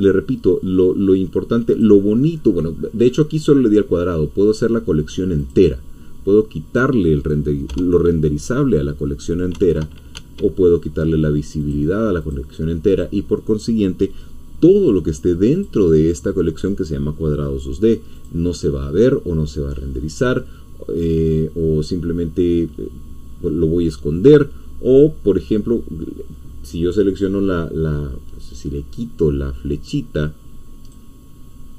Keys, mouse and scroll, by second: 1.7 click, 5.4 click, 7.7 F12, 9.5 F1, 10.1 Escape, 10.9 ., 11.6 click, 12.2 click, 15.6 click, 18.2 click, 30.8 click.